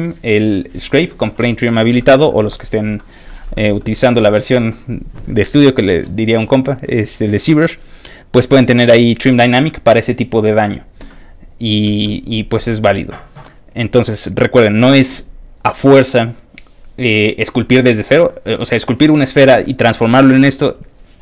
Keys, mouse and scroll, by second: 2.9 middle click, 3.5 middle click, 11.1 middle click, 12.0 middle click, 12.8 middle click, 13.4 middle click, 14.0 middle click, 20.2-21.2 middle drag.